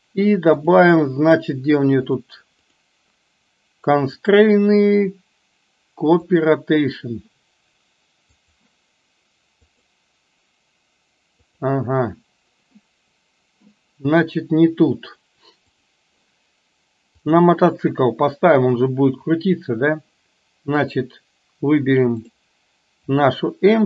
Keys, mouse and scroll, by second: 0.5 click, 4.3-6.7 drag, 8.3 click, 11.5 click, 15.8 click, 17.2 click, 20.9-21.8 drag, 23.0-23.4 drag.